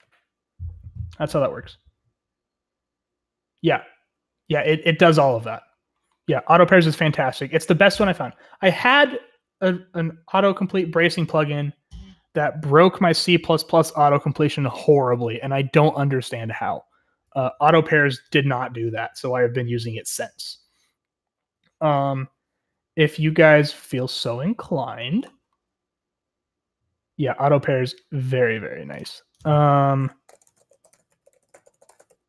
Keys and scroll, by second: 30.0-32.2 typing.